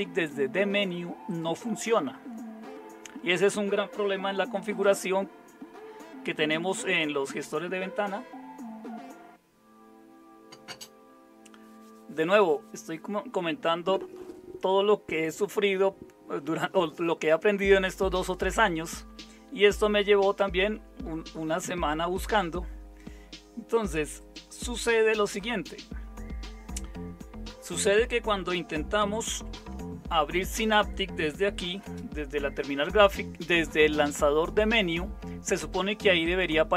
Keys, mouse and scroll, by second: 29.3 super+9, 31.8 super+space.